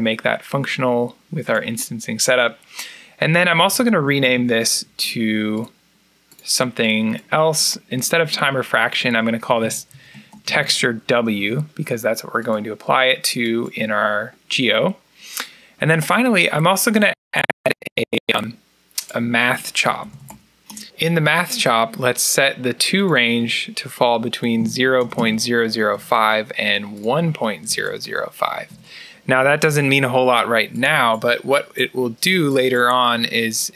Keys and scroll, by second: 3.1-4.7 typing, 9.1-11.2 typing, 16.2 alt+n, 17.7 Escape, 19.7-21.1 typing, 24.6-25.8 typing, 27.7-28.6 typing.